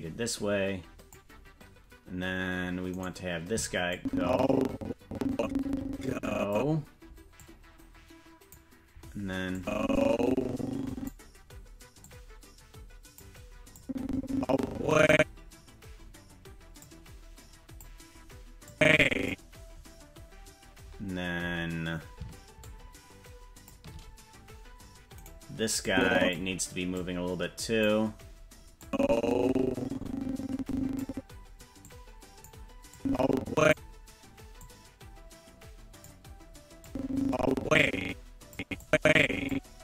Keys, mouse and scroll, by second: 2.3-2.6 scroll down 2, 3.0 right click, 3.9-6.6 drag, 7.4-8.6 drag, 9.5-11.1 drag, 12.0-13.2 drag, 13.8-15.1 drag, 16.8-17.9 drag, 18.7 click, 22.6-23.7 shift+drag, 25.3 right click, 25.8 click, 26.9 click, 28.8-31.1 drag, 31.8 click, 32.9 click, 34.6-36.1 drag, 36.8-38.6 drag, 38.8 click.